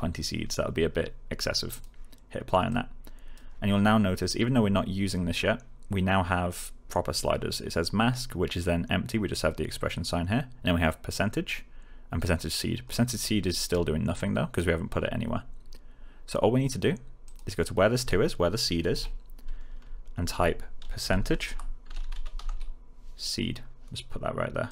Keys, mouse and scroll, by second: 1.6 click, 12.8-14.7 click, 17.2 click, 20.7-22.9 typing, 24.6 click.